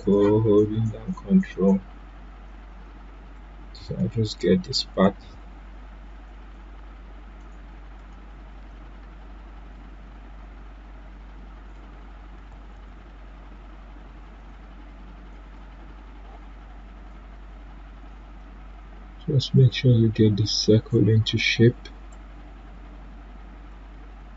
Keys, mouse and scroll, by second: 5.0-12.7 drag, 12.7 ctrl+z, 14.2-18.1 drag, 18.3-22.0 drag, 22.1-24.3 drag.